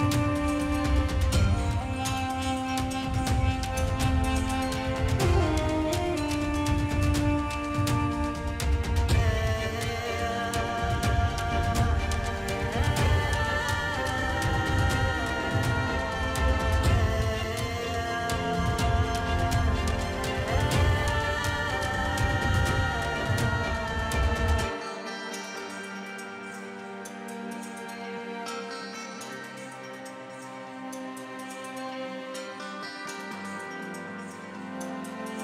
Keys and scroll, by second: 0.8 space, 1.2 [, 1.4 space, 2.2 F9, 3.9 space, 4.0 [, 7.6 space, 7.7 ], 10.1 space, 11.1-12.8 typing, 14.9 space, 15.1 space, 23.3 space, 27.9 ctrl+alt+d, 29.4 9, 30.5 ctrl+j, 31.4 ctrl+t, 35.2-35.4 typing.